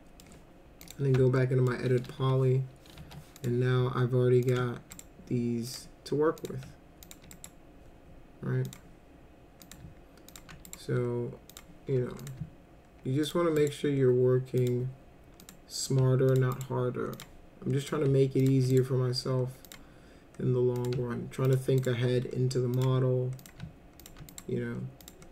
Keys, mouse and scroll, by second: 0.8 click, 1.4 alt+middle click, 2.2 1, 3.0 1, 3.4 click, 4.5 ctrl+click, 4.9 right click, 5.7 click, 6.4 click, 7.0 ctrl+click, 7.3 right click, 8.7 click, 9.6 click, 10.3 ctrl+click, 10.6 right click, 11.5 click, 12.2 click, 13.2 ctrl+click, 13.6 right click, 14.6 click, 15.4 click, 16.3 ctrl+click, 16.5 right click, 17.1 click, 17.8 click, 18.4 ctrl+click, 18.7 right click, 19.7 click, 20.8 click, 21.4 ctrl+click, 21.8 right click, 22.8 click, 23.4 click, 24.0 ctrl+click, 24.3 right click, 25.0 click.